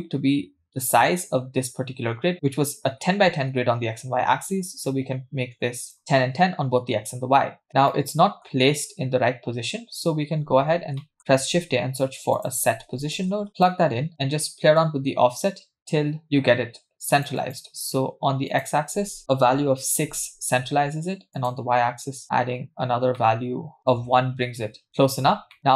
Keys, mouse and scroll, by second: 2.3-2.7 scroll down 3, 2.8 scroll up 1, 4.3 scroll up 1, 4.9-6.7 shift+drag, 7.7 scroll down 3, 7.9 middle click, 9.9-10.4 scroll up 3, 10.7-11.0 scroll down 2, 11.0 middle click, 11.5 shift+a, 14.8-17.9 drag, 18.5 click, 21.4 click, 23.2 middle click, 23.8-24.1 scroll down 1, 25.6-25.7 middle drag.